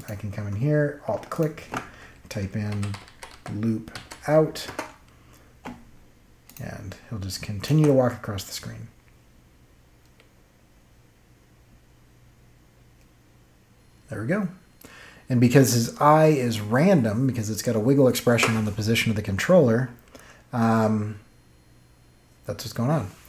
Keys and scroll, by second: 2.4-3.9 typing, 4.6 Return, 7.6 space, 16.6 space.